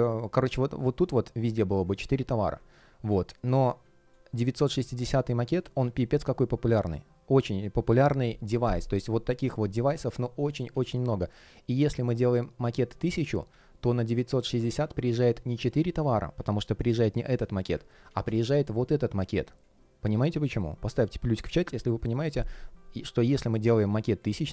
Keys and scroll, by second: 2.6 super+z, 3.0 space, 10.6 super+z, 13.3 super+z, 14.4 space, 17.8 super+z.